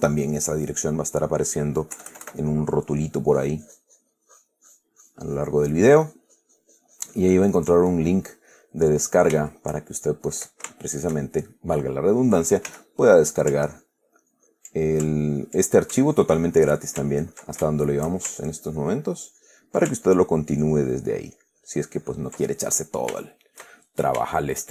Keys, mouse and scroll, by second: 2.3 KP_Add, 2.8 middle click, 3.6-8.5 drag, 8.5-9.0 middle drag, 9.2 middle click, 9.8-10.8 shift+middle drag, 11.1-12.2 shift+middle drag, 13.0 f, 13.4 click, 13.9-15.0 ctrl+drag, 15.4 ctrl+click, 16.4 ctrl+click, 17.4 ctrl+click, 18.0-18.5 ctrl+shift+middle drag, 19.0 ctrl+click, 19.6 ctrl+click, 20.3 ctrl+click, 20.9 ctrl+click, 21.7 ctrl+click, 22.3 ctrl+click, 22.8-24.0 ctrl+middle drag, 24.0-24.5 shift+middle drag, 24.5 shift+click.